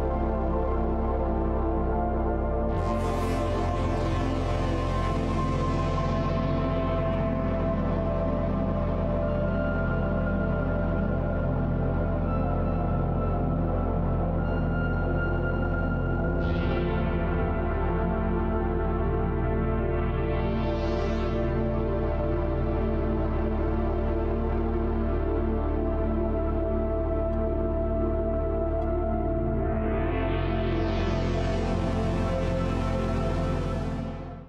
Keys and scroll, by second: 7.0 ctrl+x, 9.5 ctrl+shift+t.